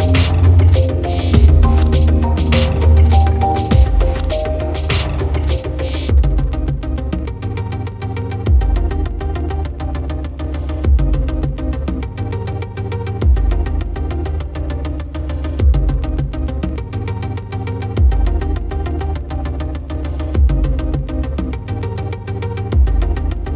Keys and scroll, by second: 13.7 ctrl+0.